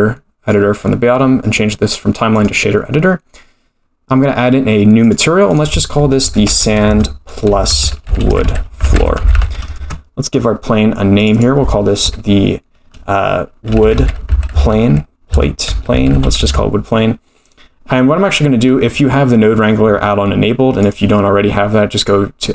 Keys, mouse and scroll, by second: 1.4-2.4 drag, 5.0-10.4 drag, 8.4 shift+o, 9.3 shift+o, 11.2-17.9 drag, 14.0 o, 18.5-19.4 scroll down 4, 19.0 middle click, 20.8-22.5 drag.